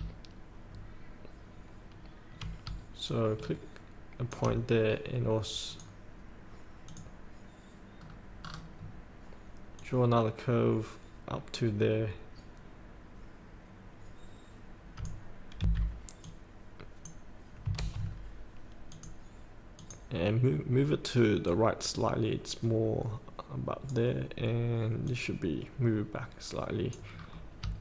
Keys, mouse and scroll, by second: 3.1 shift+click, 4.6 scroll up 1, 5.8 click, 8.0-8.4 scroll down 1, 9.8-15.2 drag, 15.5 F8, 16.2-17.3 drag, 18.9-27.2 drag, 27.2 scroll up 1.